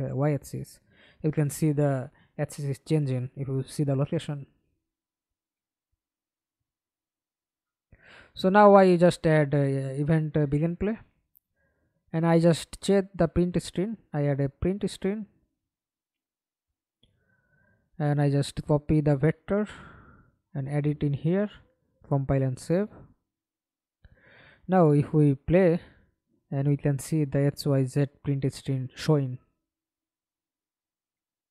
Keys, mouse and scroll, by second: 4.7 Delete, 6.7 right click, 7.6 right click, 8.1 right click, 9.1-11.5 typing, 11.7 Return, 13.7-15.5 typing, 17.8 right click, 21.8 double click, 22.2 double click, 22.6 middle click, 23.5 F11, 23.9 alt+p, 26.3 Escape, 26.7 middle click, 27.4 F11, 29.2-30.0 scroll down 10, 30.2 middle click, 30.9 alt+click.